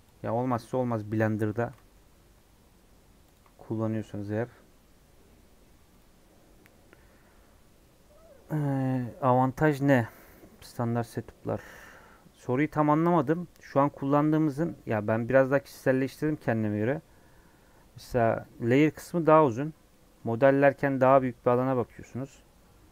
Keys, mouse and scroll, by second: 0.0-14.3 drag, 14.3 scroll down 4, 14.6 middle click, 14.9 scroll up 5, 19.9-21.3 middle drag, 21.3 scroll down 5, 21.6 middle click, 21.8-22.5 scroll up 5, 22.5-22.8 scroll down 2, 22.8-22.9 middle drag.